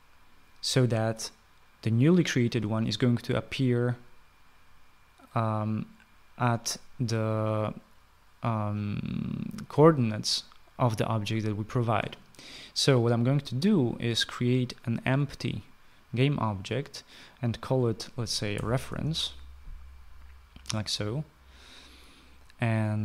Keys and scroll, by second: 18.4-19.5 typing.